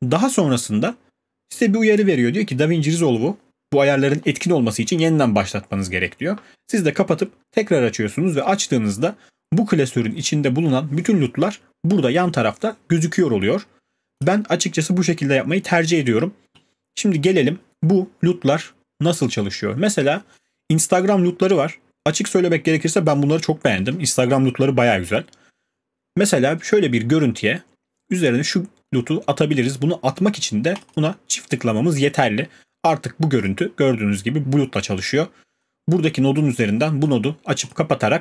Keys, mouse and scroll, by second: 14.2 click, 20.4 click, 26.7 click, 30.9 click, 33.4 click, 37.1 click, 37.7 click.